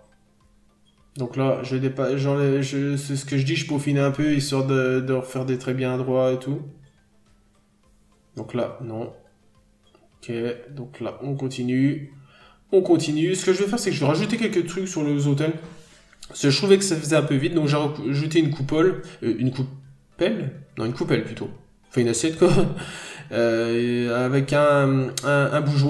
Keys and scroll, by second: 0.5 scroll up 1, 0.7 b, 1.9-2.2 scroll down 1, 2.9 n, 4.5 b, 5.4 ctrl+z, 6.3 ctrl+z, 6.7 ctrl+z, 6.9 n, 7.4 scroll up 1, 7.7 b, 8.7 scroll down 1, 9.0 n, 9.2-9.6 scroll down 1, 10.4-10.8 scroll up 1, 10.9 scroll up 1, 13.4 n, 18.4 ctrl+z, 18.9 ctrl+z, 20.0 ctrl+z, 20.7 ctrl+z, 21.6 ctrl+z, 22.5 ctrl+z, 23.7 scroll down 1, 23.9 n, 24.2-24.6 scroll up 1, 24.9 b.